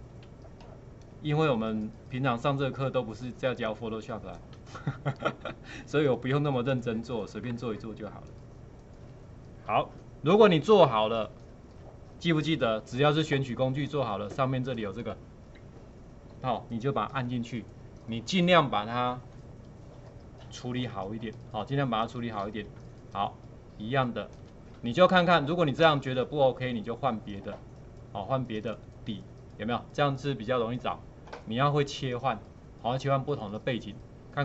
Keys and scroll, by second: 13.2 ctrl+2, 22.8 space.